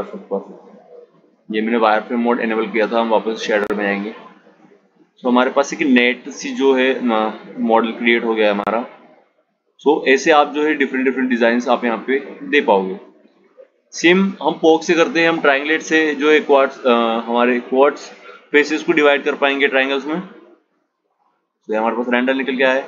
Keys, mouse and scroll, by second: 1.2 click, 2.4 click, 10.4 click, 21.7 click, 22.7 shift+a.